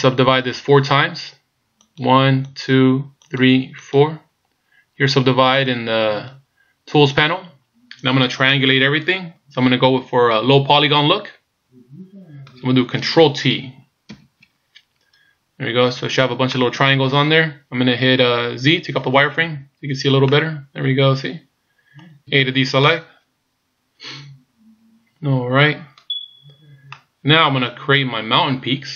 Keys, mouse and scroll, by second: 1.8 click, 2.5 click, 3.3 click, 3.8 click, 8.5 middle click, 14.4 ctrl+t, 15.5-16.6 scroll up 2, 16.6 middle click, 19.5 z, 20.4 middle click, 22.4 a, 22.8 middle click, 27.0 middle click.